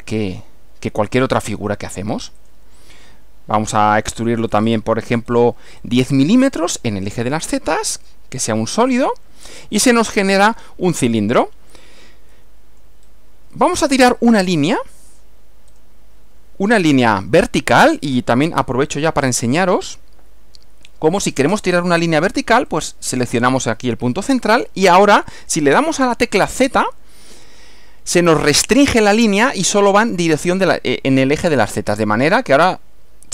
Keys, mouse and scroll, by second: 0.1 click, 2.5 click, 4.2 click, 4.8-5.1 scroll up 2, 5.1 scroll down 1, 5.3 scroll up 1, 5.8 scroll up 1, 8.0 click, 9.1 click, 10.4-11.6 middle drag, 12.3-13.1 shift+middle drag, 13.1 shift+scroll up 2, 15.2 click, 15.7 click, 17.7 click, 22.7 click, 26.6 z.